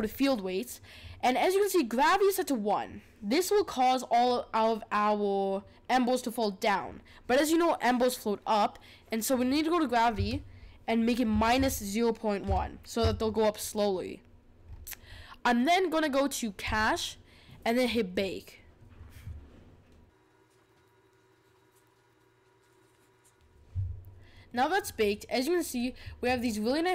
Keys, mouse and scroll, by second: 9.3-12.4 drag, 14.6-16.6 scroll up 5, 16.6-23.7 drag, 24.4-25.7 middle drag, 25.7-26.9 scroll down 1.